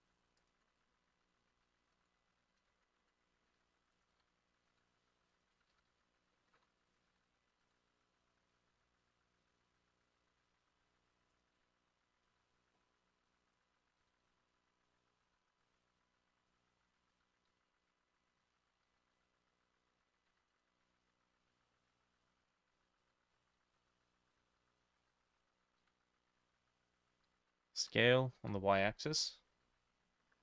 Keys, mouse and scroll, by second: 2.7 ctrl+middle click, 2.7 ctrl+z, 2.7-6.4 drag, 3.5 ctrl+middle click, 3.6 ctrl+i, 3.9 ctrl+r, 4.2 Escape, 4.6 ctrl+middle click, 4.8 ctrl+b, 5.5 ctrl+middle click, 5.6 ctrl+z, 5.8 ctrl+z, 6.4 middle click, 6.6 ctrl+r, 7.1 Escape, 7.5 ctrl+middle click, 7.7 ctrl+b, 8.3-9.3 shift+middle drag, 8.5 shift+scroll down 1, 11.1-30.4 shift+drag, 11.1 shift+middle click, 12.3 e, 14.3 x, 15.3 x, 16.8 z, 17.2 z, 17.6 Escape, 19.2 s, 19.2 y, 20.4 y, 20.9 z, 21.1 z, 24.5 s, 25.1 a, 25.9 y, 27.3 Escape, 27.9 s, 28.4 y.